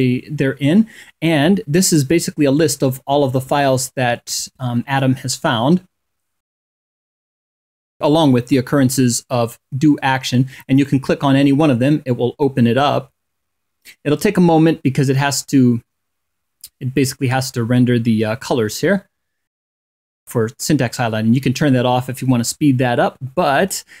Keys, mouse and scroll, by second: 1.8 2, 2.3 8, 3.0 2, 3.7 8, 10.4 click, 18.0-18.3 scroll down 1, 19.7 click, 20.0-24.0 scroll up 2.